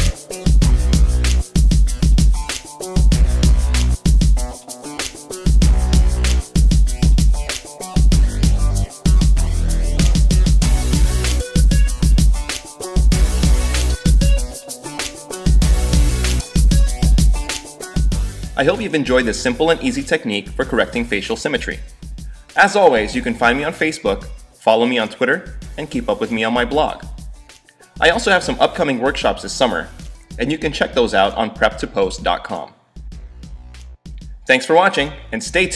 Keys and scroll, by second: 2.1 x, 5.7 x, 8.0 ], 12.5 super+0, 12.9 super+=, 13.4 space.